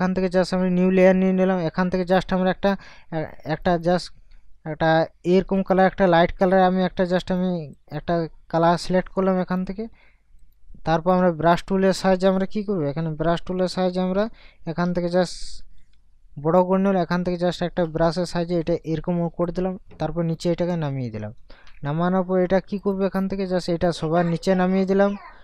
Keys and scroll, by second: 14.3 Caps_Lock, 15.6 ].